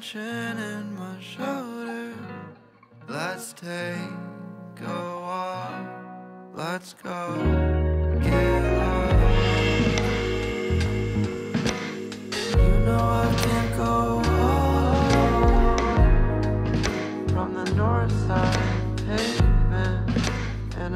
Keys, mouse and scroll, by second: 0.0 Delete, 2.4 Tab, 3.8-4.8 middle drag, 4.8-5.3 scroll down 2, 5.3-8.0 middle drag, 8.0 click, 8.6-13.9 drag, 14.8-15.8 drag, 17.0 click, 17.6-18.3 middle drag, 18.3-19.3 right drag, 19.3-20.7 middle drag, 20.7 s.